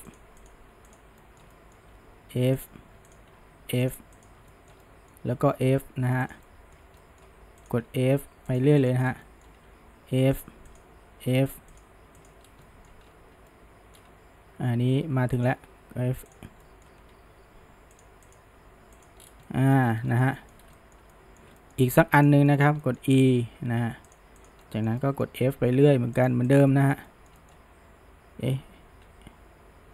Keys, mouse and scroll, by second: 0.4 click, 0.9 click, 1.2-2.0 shift+middle drag, 2.0 f, 3.1 drag, 3.4 f, 4.2 click, 4.5-5.6 shift+middle drag, 5.6 f, 6.5-7.7 shift+middle drag, 7.7 click, 8.0 f, 8.9 drag, 9.1 scroll down 1, 9.3-9.7 shift+middle drag, 9.7 f, 10.7 click, 11.1 f, 12.2 drag, 12.5 scroll down 1, 12.7-13.1 shift+middle drag, 13.1-13.5 scroll up 1, 13.5-15.4 middle drag, 15.4 shift+click, 15.7 f, 16.3 click, 16.6 middle click, 17.1 g, 18.3 click, 18.6 g, 19.2 scroll, 19.5-19.8 middle drag, 19.8-20.1 scroll, 20.1-20.6 shift+middle drag, 20.6 scroll, 20.8-22.2 shift+middle drag, 22.2 click, 22.5 shift+middle click, 23.2 e, 24.4 click, 24.7-25.5 shift+middle drag, 25.5 f, 26.5 click, 26.7-29.1 middle drag, 29.1 f.